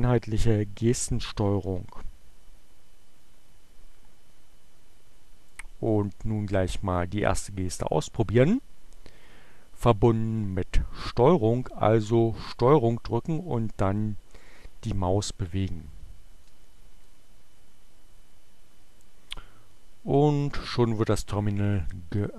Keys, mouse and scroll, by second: 5.4 click, 19.3 click, 21.7 click.